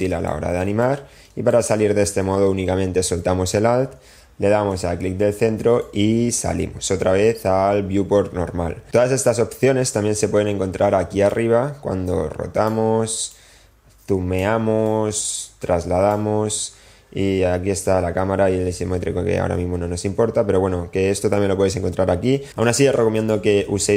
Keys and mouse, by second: 0.3 alt+middle click, 1.0 alt+middle click, 4.0-7.2 middle drag, 12.3-13.6 drag, 14.2 click, 15.9-17.3 drag, 18.6 click, 19.1-19.8 drag.